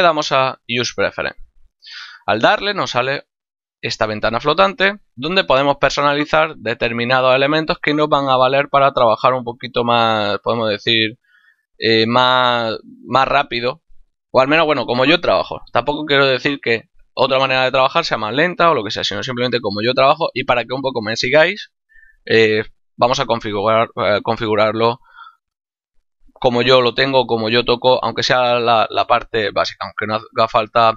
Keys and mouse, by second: 1.5 click, 3.3 click, 10.6 click, 12.1 click, 13.5 click.